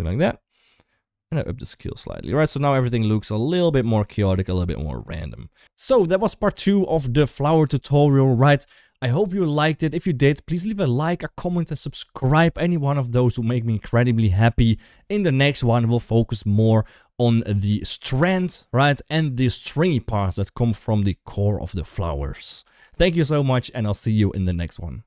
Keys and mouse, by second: 0.1-1.8 shift+drag, 2.0-3.8 middle drag, 4.1 shift+middle drag, 4.4 middle click, 5.4 ctrl+s.